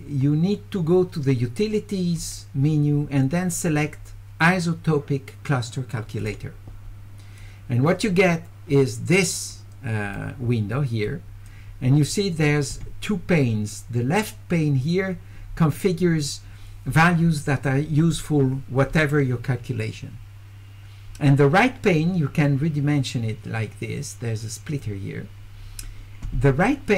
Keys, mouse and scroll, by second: 2.2 click, 2.3 scroll up 1, 6.3 click, 7.4 click, 9.6 click, 11.1 click, 22.5-24.8 drag.